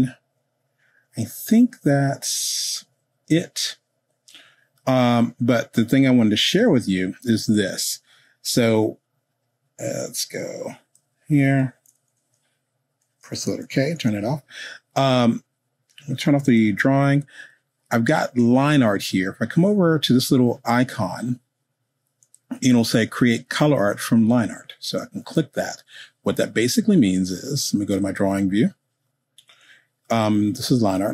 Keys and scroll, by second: 13.9 k.